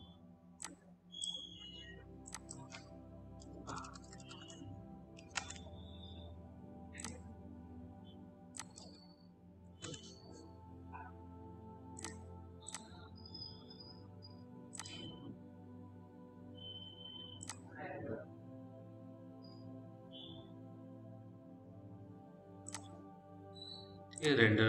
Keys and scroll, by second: 4.1 BackSpace, 5.0 KP_1, 5.3 Return, 9.7 Return.